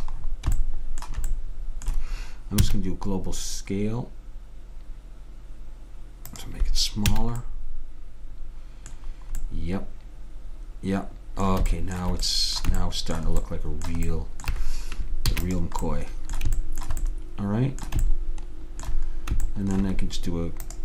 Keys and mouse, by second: 2.7 s, 7.2 a, 15.4 ctrl+s, 20.7 click.